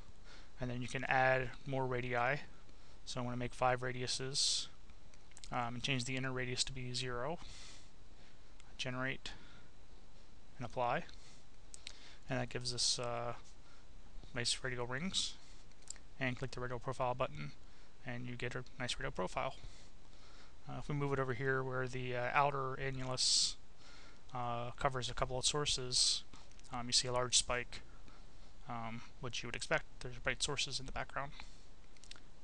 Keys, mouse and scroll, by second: 0.9 click, 2.4 5, 3.4 click, 4.3 0, 6.7-7.7 drag, 7.9 0, 8.9 click, 11.1 click, 12.6 click, 13.5 click, 14.9 click, 16.4-17.8 drag, 18.4-22.9 drag, 23.4 click, 24.7 click, 26.5-28.0 drag, 30.1 click, 32.3 click.